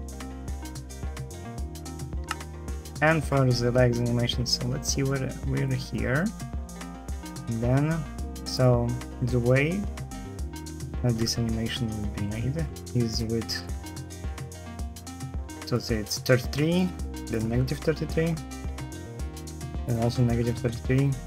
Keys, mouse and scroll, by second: 2.0 space, 11.3 F3, 12.0-13.2 typing, 14.6 f.